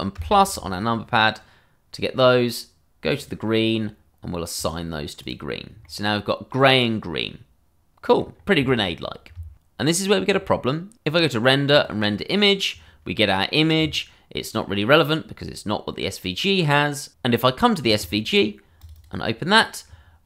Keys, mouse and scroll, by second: 1.0 scroll down 1, 1.3 middle click, 3.1 click, 5.5 scroll down 1, 5.8 middle click, 8.3-8.7 scroll, 8.7 shift+middle click, 10.3 click, 10.6 middle click, 10.9 click, 16.7 click, 18.8 click, 19.0 double click.